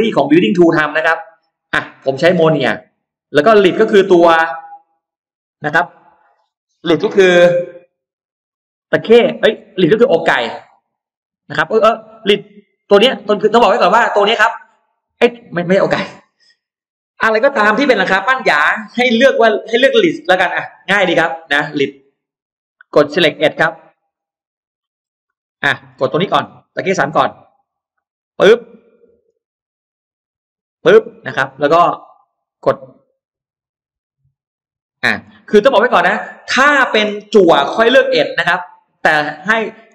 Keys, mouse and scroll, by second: 1.6 click, 3.2 click, 12.1 click, 14.0 click, 21.7 click, 23.6 click, 24.2 middle click, 25.0-25.4 scroll up 2, 25.5 middle click, 25.6-26.7 scroll up 2, 27.9 click, 28.4 middle click, 29.1 scroll down 1, 29.4 scroll up 1, 30.3 click, 30.8-31.2 scroll down 1, 31.4 middle click, 32.2 click, 33.0-33.4 scroll up 1, 34.7 click, 35.0-36.6 scroll down 5, 35.8 middle click, 36.6 middle click, 36.8 scroll down 2, 37.6 click, 39.8 click.